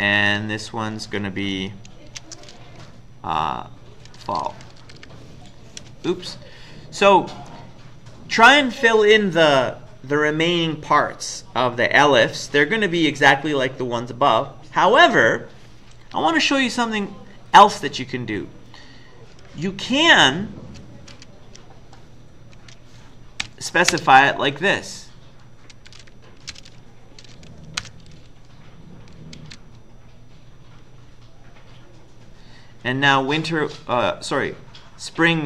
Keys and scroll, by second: 0.6 Down, 2.1 ctrl+shift+Left, 4.1-5.8 typing, 7.3 Up, 7.5 Up, 8.0 Up, 18.0 Up, 18.7 Up, 19.6 Left, 20.2 Left, 20.6-21.1 Left, 22.6 shift+End, 23.4 Delete, 23.9 space, 25.7-26.5 typing, 27.6-29.9 typing.